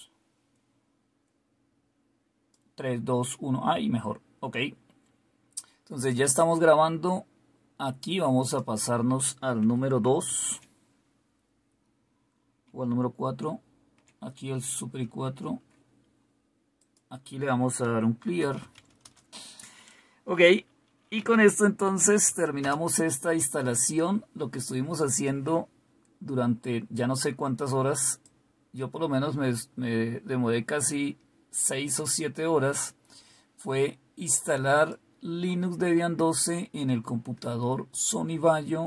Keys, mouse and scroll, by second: 8.3 click, 8.7 click, 10.2 super+2, 13.3 super+4, 16.8 click, 17.6-19.2 typing, 20.9-22.5 typing, 22.6 Return, 26.7 typing, 28.2-35.4 drag.